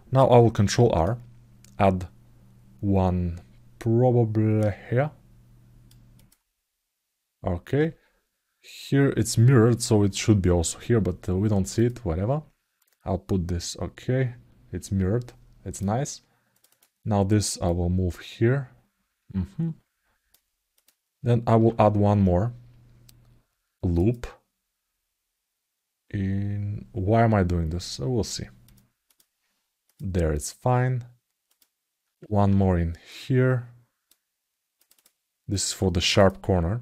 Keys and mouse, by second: 11.5 click, 12.5-15.6 drag, 16.4 click, 17.4-20.1 drag, 20.5 click, 21.4 ctrl+r, 28.8 click, 29.6 click, 31.3 click, 34.7 click, 35.3 click.